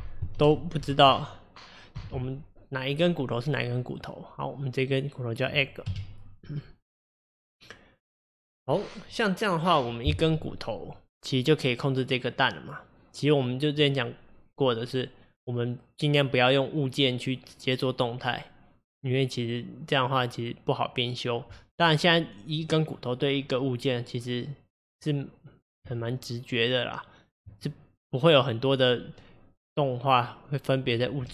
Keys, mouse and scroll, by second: 4.0-5.9 middle drag, 5.9 KP_1, 7.3 click, 25.8 Tab.